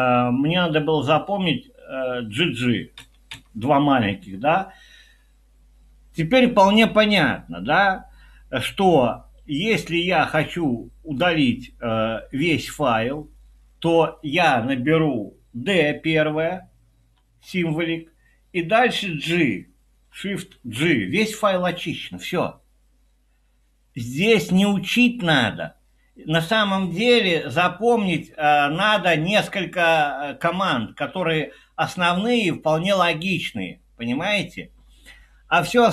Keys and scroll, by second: 3.0-3.3 typing, 17.2 d, 20.6 shift+g.